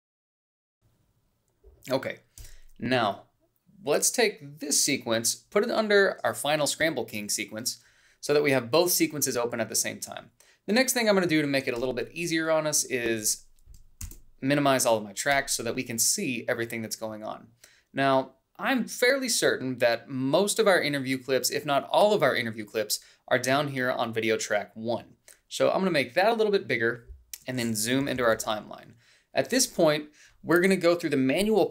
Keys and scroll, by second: 14.6 shift+-, 28.7 =.